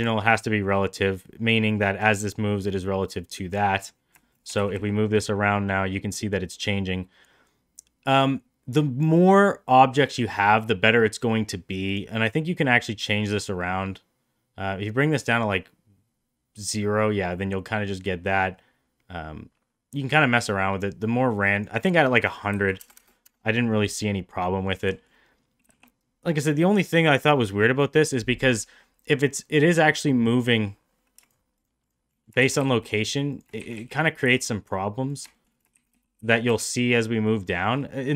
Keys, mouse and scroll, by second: 0.0 click, 3.5 click, 4.2 shift+middle drag, 4.6 shift+d, 12.7-21.6 drag, 21.7-23.7 drag, 22.9 KP_0, 24.3-24.6 middle drag, 24.9 shift+middle click, 25.6 g, 27.1-27.6 middle drag, 30.5 middle click, 31.8 shift+click, 32.1 middle click, 32.4 shift+d, 33.6 shift+d, 35.3 shift+middle drag, 35.7 shift+d, 37.5 middle drag, 37.9 middle drag.